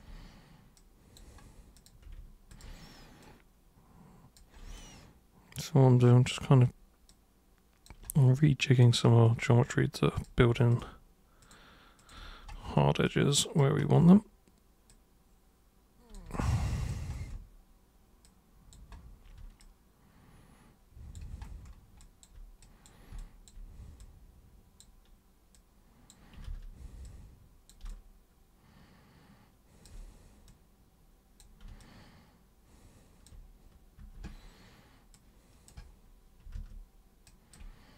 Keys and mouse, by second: 0.8 super+click, 1.8 super+click, 2.5 ctrl+shift+super+click, 3.2-4.4 super+drag, 4.8-6.4 alt+super+drag, 7.1 super+click, 8.1 super+space, 8.4 click, 10.2 super+click, 10.7 ctrl+shift+super+click, 11.5 ctrl+shift+super+click, 12.0 ctrl+shift+super+click, 13.0 alt+super+click, 14.9-16.1 super+drag, 16.4 alt+super+click, 18.3 super+click, 19.6-21.2 alt+super+drag, 22.0 alt+super+click, 22.6 super+drag, 23.2-23.5 alt+super+drag, 24.0 super+click, 25.6 super+click, 26.5 ctrl+super+z, 27.1 super+click, 27.9-29.8 alt+super+drag, 30.5-31.4 super+drag, 31.9-33.3 alt+super+drag, 34.0 super+r, 35.1-35.7 super+drag, 36.6 ctrl+super+z, 37.3 ctrl+super+drag.